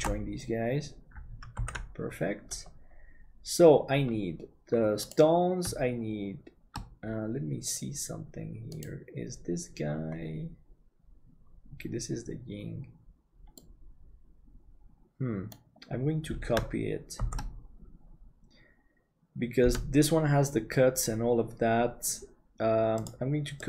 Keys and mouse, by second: 0.4 ctrl+j, 1.9 ctrl+s, 13.6-23.0 middle drag.